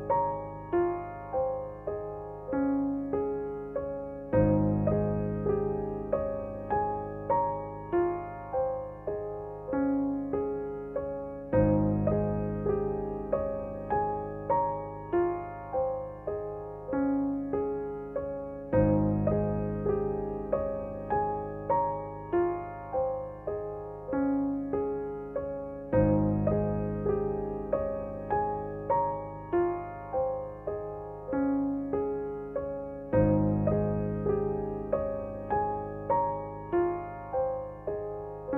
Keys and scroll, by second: 14.5 g, 17.9 r, 34.7 g, 34.8 x, 37.5 Tab.